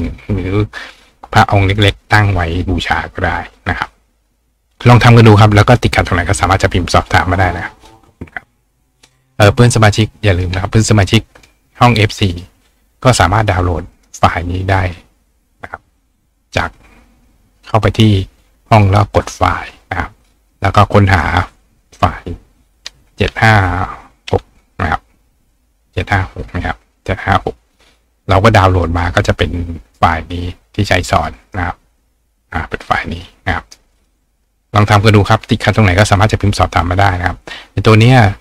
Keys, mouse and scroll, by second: 11.4 click, 11.5-13.0 right drag, 13.5 right click, 13.9 click, 16.3-17.5 scroll down 1, 17.5 scroll up 1, 18.7 click, 21.1 click, 21.1-31.5 right drag, 30.0 click, 31.2 click, 32.4 click, 33.6 right click.